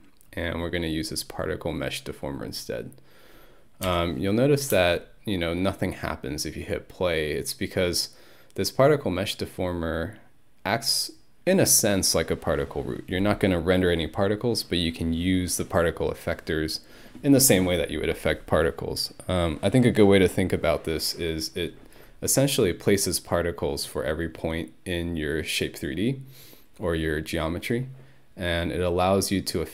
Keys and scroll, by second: 3.9 Home, 4.7 space.